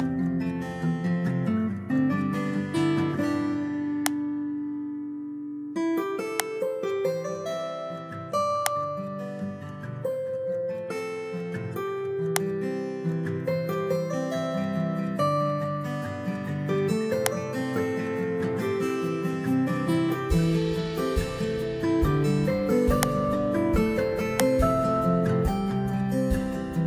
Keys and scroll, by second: 2.6 Delete, 5.3 BackSpace, 14.2 BackSpace.